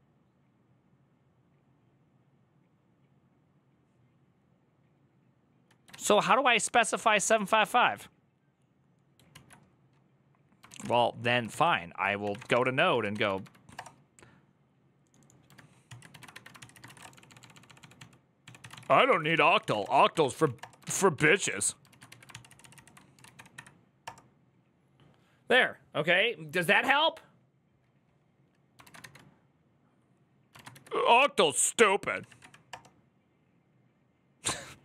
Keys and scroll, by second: 9.1 alt+{, 10.5 ctrl+a, 10.6 c, 11.3 ctrl+c, 11.7-13.7 typing, 15.9 ctrl+a, 16.1-23.6 typing, 19.1 ctrl+c, 21.7 ctrl+a, 22.1 ctrl+c, 22.3 ctrl+c, 22.6 ctrl+c, 23.8 Up, 23.8 Return, 28.7 ctrl+a, 28.8 1, 30.3 ctrl+a, 30.5 2, 31.7-32.6 typing.